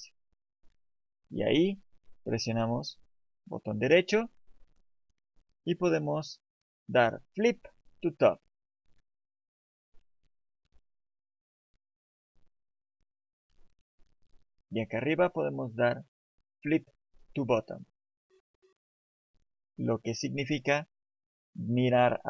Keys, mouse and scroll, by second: 3.1 right click, 9.8 click, 15.3 right click.